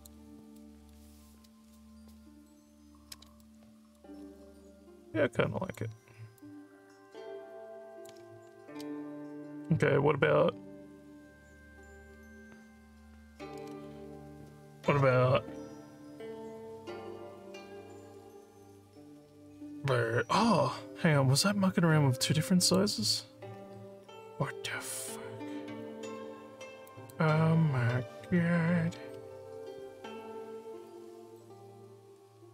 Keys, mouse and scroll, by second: 0.6 alt+middle click, 3.4 alt+middle click, 4.3-5.7 alt+drag, 6.4-8.1 alt+drag, 22.6 click, 26.9 click, 31.3-32.5 alt+drag.